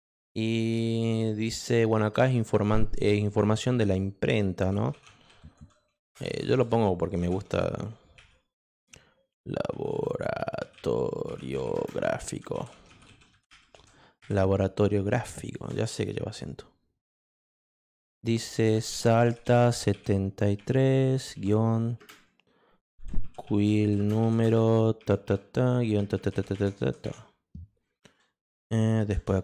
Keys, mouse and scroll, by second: 5.5-14.2 typing, 15.6 shift+Return, 18.5-20.6 typing, 22.6-27.5 typing, 29.2 shift+Return.